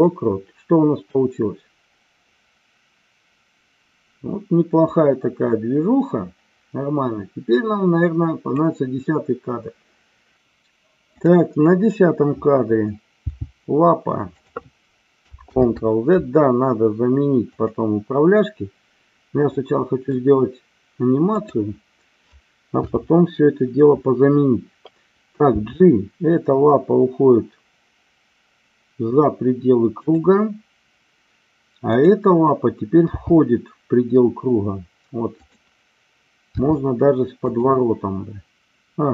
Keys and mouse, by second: 1.1-8.6 drag, 11.2 click, 13.2 g, 14.3 click, 15.4 ctrl+z, 17.5-18.4 drag, 19.5-20.2 middle drag, 21.3 click, 22.8 KP_7, 25.4 g, 30.0 click, 31.9 click, 33.1 g, 35.4 click, 36.5 r, 37.4 click.